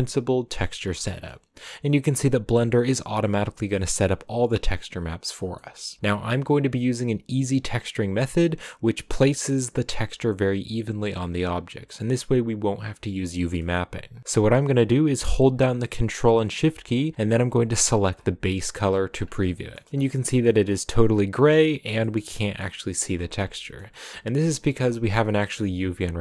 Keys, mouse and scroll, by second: 0.0-1.0 drag, 1.0-6.6 middle drag, 6.6 click, 17.7 ctrl+shift+click, 19.0-19.3 scroll up 4, 19.5 shift+middle click, 19.9-20.4 scroll up 1, 20.4 middle click, 21.0-21.3 scroll up 7, 21.5-23.5 middle drag, 23.5 scroll up 2, 24.0-25.5 middle drag, 25.5-26.2 scroll down 1.